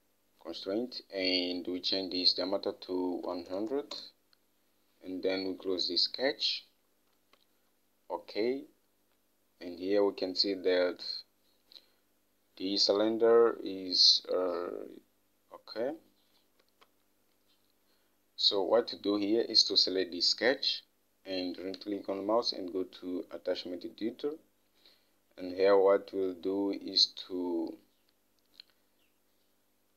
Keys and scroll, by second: 3.5-4.5 typing, 7.6 alt+Tab, 17.0 alt+Tab.